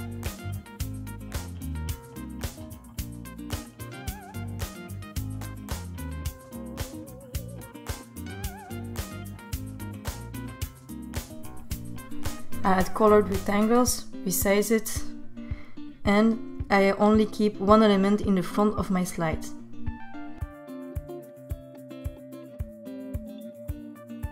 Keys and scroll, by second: 12.3 r.